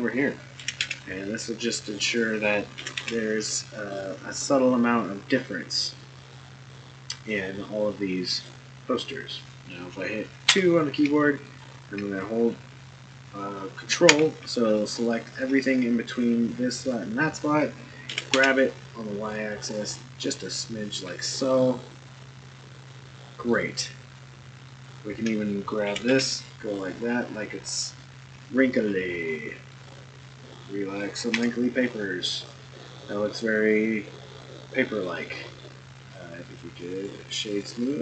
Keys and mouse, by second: 0.6 g, 0.8 y, 2.8 g, 6.0-8.4 middle drag, 10.5 2, 14.8 ctrl+click, 18.1 g, 21.2-23.5 middle drag, 24.7 alt+click, 25.8 g, 29.8 click, 30.4 middle click, 31.3 Tab, 32.6-33.3 middle drag, 34.0-35.0 middle drag, 35.2-35.6 middle drag, 36.0 right click, 37.1 right click.